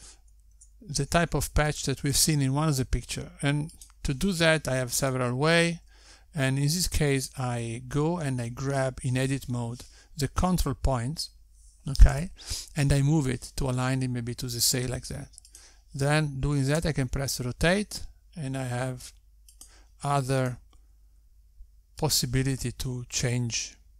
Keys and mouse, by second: 2.7 Tab, 3.7 click, 4.2 g, 7.4 click, 8.1 g, 17.7 click, 18.9 r, 22.7 click, 23.0 r.